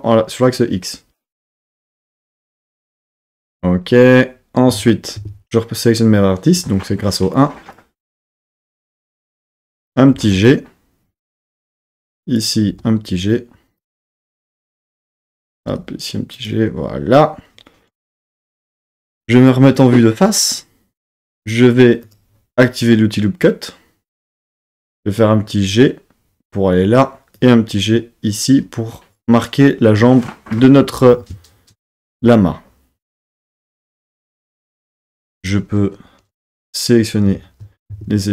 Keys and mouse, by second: 1.5 click, 2.6 KP_3, 4.7 Tab, 5.2 1, 7.4 click, 10.2 g, 11.4 click, 12.0 click, 12.7 g, 13.8 click, 14.4 click, 15.0 click, 15.6 g, 16.4 click, 19.1 KP_1, 22.1 click, 24.9 click, 27.4 click, 34.3 click, 35.0 2, 35.4 click, 37.3 z, 37.9 1.